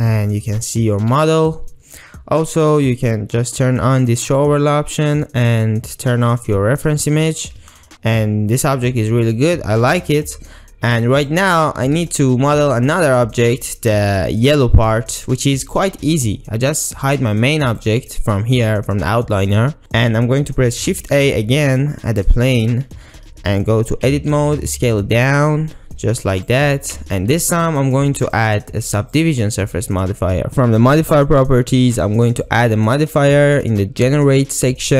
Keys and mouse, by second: 0.0-1.1 ctrl+middle drag, 1.1 click, 4.4 click, 6.4 click, 7.2 Tab, 7.8-8.7 ctrl+middle drag, 8.8-9.9 middle drag, 11.2 click, 12.1-13.1 ctrl+middle drag, 17.7 click, 21.2 shift+a, 24.1 Tab, 24.6 s, 26.5 click, 27.0 Tab, 29.3-30.5 drag, 32.3-34.9 drag.